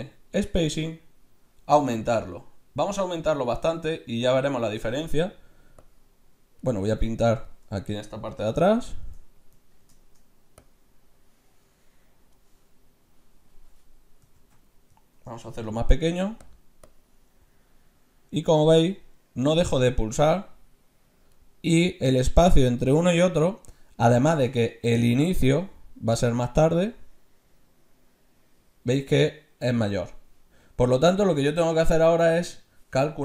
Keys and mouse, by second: 2.0-3.9 drag, 5.9-7.6 drag, 10.7-11.8 drag, 11.8 right click, 13.7 middle click, 14.6 ctrl+z, 15.7 f, 16.4 middle click, 16.9-18.5 drag, 24.9 ctrl+z, 25.5-27.3 drag, 31.9 ctrl+z.